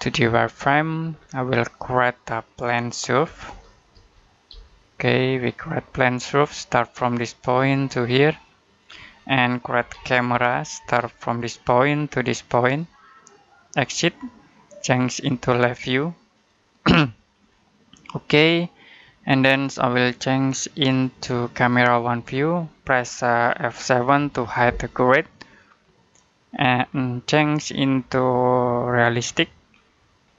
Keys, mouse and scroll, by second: 1.0-1.5 scroll down 1, 1.5 middle click, 2.9-4.4 typing, 6.2 click, 9.1 middle click, 9.6-10.7 typing, 11.5 click, 17.2-18.2 scroll up 1, 18.2-18.6 scroll down 1, 18.6 middle click, 19.8 click, 22.1-22.5 scroll down 1, 22.5 middle click, 24.0 F7, 25.0 shift+middle click, 26.7-27.8 scroll up 1, 27.8 click, 29.7 middle click, 30.1-30.3 scroll up 1.